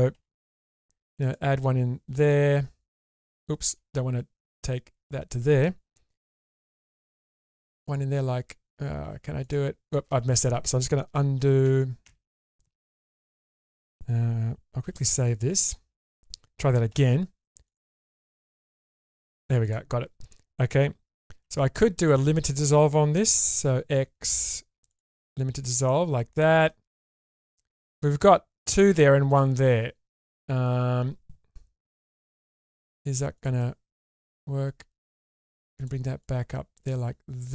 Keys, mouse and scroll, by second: 0.1 k, 6.1 k, 11.1 ctrl+z, 11.7 ctrl+z, 12.1 ctrl+z, 13.3 click, 14.9 ctrl+s, 16.9 k, 19.7 click, 21.5 2, 22.0 click, 23.7 x, 25.5 click, 25.9 middle click, 27.4 middle click, 32.3 1, 33.3 click, 33.9-35.2 drag, 35.8 click, 36.2-37.5 drag.